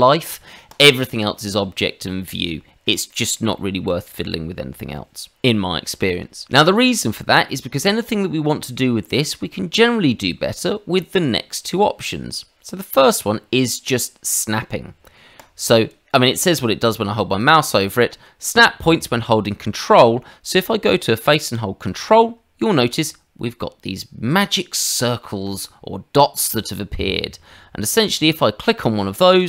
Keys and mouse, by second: 0.7 click, 3.1 middle click, 3.5 shift+middle click, 4.1 middle click, 7.5 middle click, 8.8 shift+middle click, 15.3 click, 20.6 middle click.